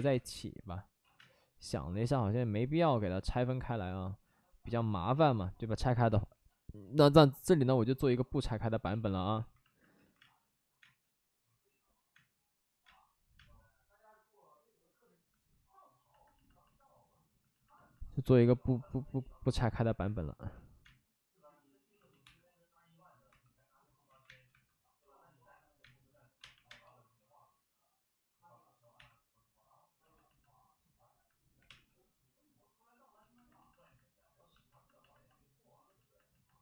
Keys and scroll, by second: 0.0 3, 0.9 ctrl+z, 1.1 space, 4.4 ctrl+z, 5.9 b, 6.2 p, 6.8 p, 8.8 ctrl+z, 9.0 ctrl+z, 9.9 ctrl+z, 10.1 space, 10.7 space, 12.1 space, 12.8 space, 13.3 space, 18.2 3, 18.3 3, 20.8 space, 22.2 1, 23.2 2, 24.0 ctrl+z, 24.2 space, 24.4 1, 25.7 space, 26.1 5, 26.3 space, 28.9 3, 31.5 5, 31.6 space.